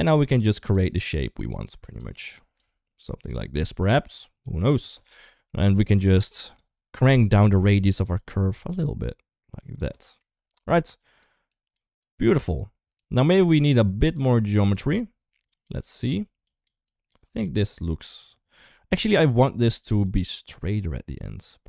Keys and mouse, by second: 1.4 click, 2.1 click, 3.0 click, 3.7 click, 4.2 click, 6.4-6.7 drag, 7.2 middle click, 8.0-9.6 shift+drag, 10.9 click, 11.3 click, 11.8 click, 12.9 click, 13.7 click, 14.3 click, 15.3 click, 15.7 click, 16.2 click, 16.8 click, 17.3 click, 17.7 click, 19.2 click, 20.3 click, 21.0 click.